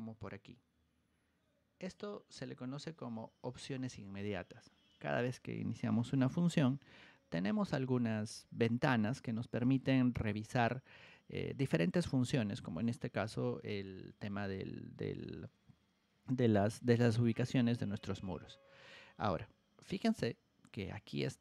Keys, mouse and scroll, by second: 0.2-3.8 drag, 19.9 right click, 20.9 click.